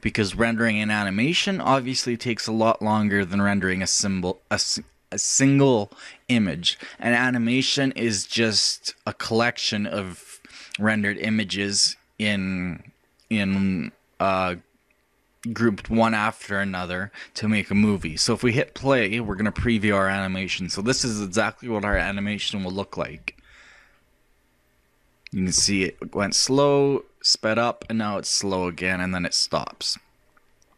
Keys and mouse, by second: 19.3-26.8 middle drag.